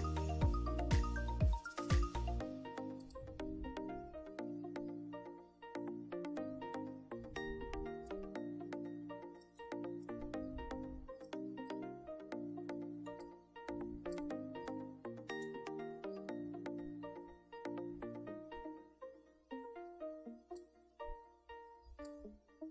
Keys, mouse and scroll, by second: 3.1 click, 8.1 scroll up 2, 10.1-11.4 ctrl+middle drag, 11.4 ctrl+scroll up 2, 12.4 scroll down 2, 13.3 click, 13.9 scroll up 1, 13.9 scroll down 1, 20.7-22.3 drag.